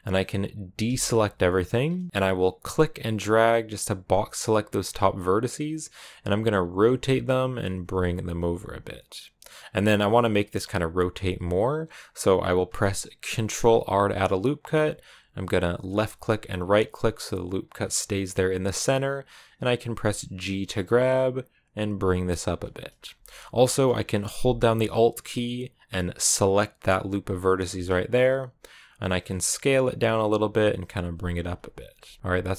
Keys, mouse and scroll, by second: 0.7 a, 4.8 click, 6.2 r, 7.4 g, 8.0 r, 8.4 g, 11.0 g, 13.2 ctrl+r, 19.0 g, 22.8-23.7 scroll up 2, 23.7 shift+middle click, 24.0-26.5 scroll up 1, 26.5-29.0 alt+right drag, 29.0 s, 30.2 g, 30.9 r, 31.3 g, 32.1 a.